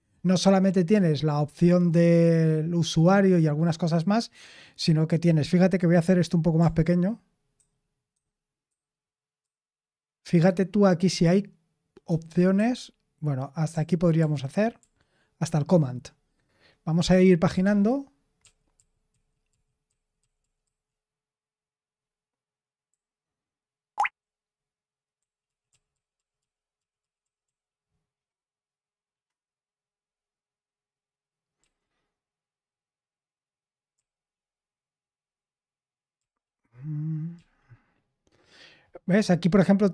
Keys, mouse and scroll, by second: 7.5 ctrl+shift+-, 8.1 ctrl+_, 8.7 ctrl+_, 9.4 ctrl+_, 13.7 ctrl+*, 17.6-20.6 typing, 22.8-27.4 typing, 31.5 d, 33.9 d, 36.1 d, 37.3 d.